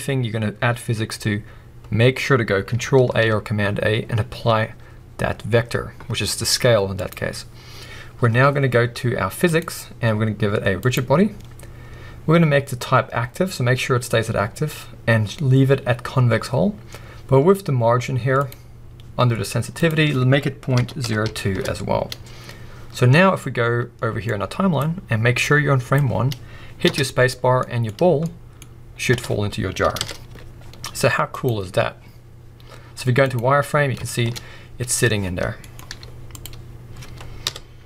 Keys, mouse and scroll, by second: 3.0 ctrl+a, 9.4 click, 10.8-18.4 drag, 19.7-27.6 drag, 21.5 Return, 22.9-23.2 scroll down 1, 26.8 space, 27.3 scroll down 1, 27.6-28.9 middle drag, 27.9 scroll up 1, 29.1 space, 30.0 KP_1, 30.2 z, 33.8 scroll down 1, 34.0 shift+middle click, 34.3-37.8 scroll up 1.